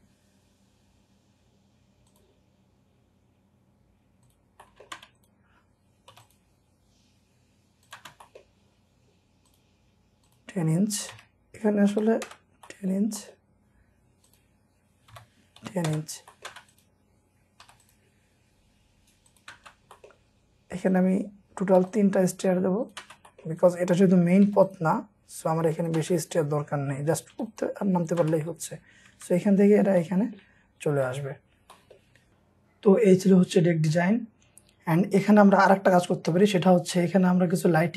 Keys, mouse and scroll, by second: 4.5 scroll up 1, 4.6 middle click, 5.0 space, 6.1 typing, 8.2-9.1 scroll up 1, 8.2 space, 9.1 middle click, 9.1-9.5 scroll, 11.1-11.9 typing, 12.3 Return, 12.7 middle click, 13.5-15.1 scroll up 1, 15.1-16.5 typing, 15.9 Return, 16.2 scroll up 1, 17.6 p, 19.9 middle click, 19.9 scroll up 1, 22.6 p, 23.2-24.4 scroll up 1, 23.2 space, 27.4 typing, 28.4-28.8 scroll down 1, 29.0 Escape, 29.2 Escape, 29.4-29.8 scroll down 1, 30.0 middle click, 30.6 scroll down 1, 31.1 middle click, 32.2 scroll down 1, 33.1-33.6 scroll up 1, 33.9 middle click.